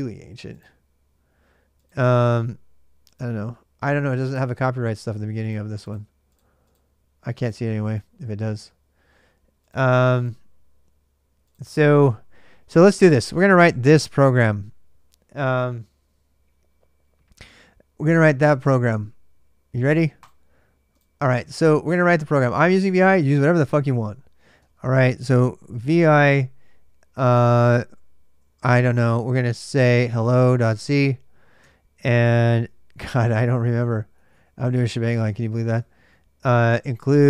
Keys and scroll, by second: 24.3 typing, 29.7-31.4 typing, 32.7 typing, 33.9 typing, 35.6-37.2 typing.